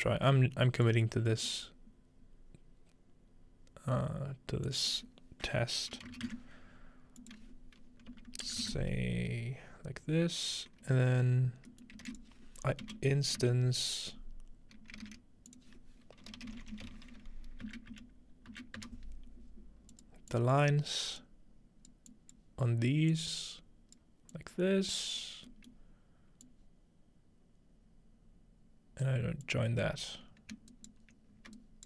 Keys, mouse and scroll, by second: 0.9-2.3 drag, 1.5 middle click, 2.3 scroll up 2, 3.1-3.8 scroll down 2, 4.7 click, 7.2-9.3 drag, 8.1-9.1 typing, 11.9 shift+middle click, 12.1 shift+a, 12.1 shift+click, 15.1 typing, 15.5-17.1 shift+drag, 16.4-17.4 typing, 17.7 End, 19.9-22.4 drag, 23.1-24.0 drag, 25.3-26.5 scroll down 2, 26.5-31.5 drag, 30.7-31.8 ctrl+right drag.